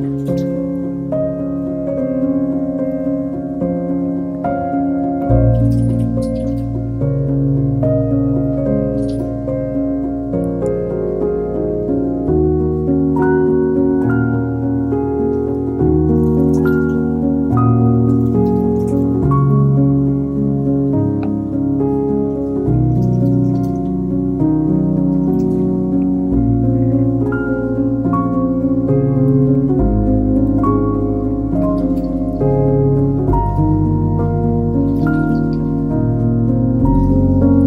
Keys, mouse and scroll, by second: 4.4-6.4 middle drag, 6.9 click, 9.0 click, 10.7 e, 12.3 a, 12.9 click, 13.5 Tab, 13.8-15.5 middle drag, 17.3 Tab, 19.3-20.9 drag, 20.9 Tab, 21.0-22.7 scroll up 2, 22.7-23.2 middle drag, 23.2 Tab, 23.6 click, 24.0 click, 25.7 scroll down 1, 25.9 Tab, 26.0-28.2 middle drag, 28.4 shift+right click, 29.6 shift+a, 30.2 shift+a, 31.3-32.2 middle drag, 32.2 s, 34.0-35.0 middle drag, 35.0 s, 37.0 click.